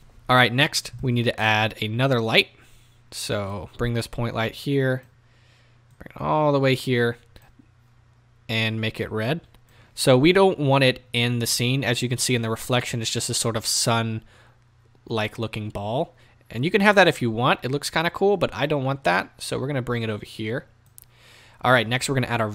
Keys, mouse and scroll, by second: 0.0 click, 4.5-9.0 drag, 12.1-22.5 drag.